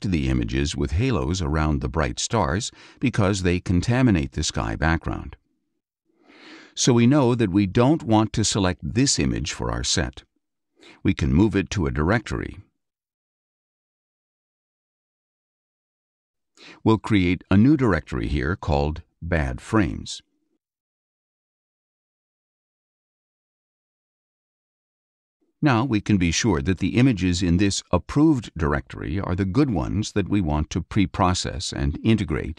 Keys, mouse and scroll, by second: 4.3 Up, 4.9 Down, 5.4 Up, 6.0 Down, 12.2 click, 15.5 click, 17.3 click, 19.0-21.8 typing, 22.6 click, 25.9 click.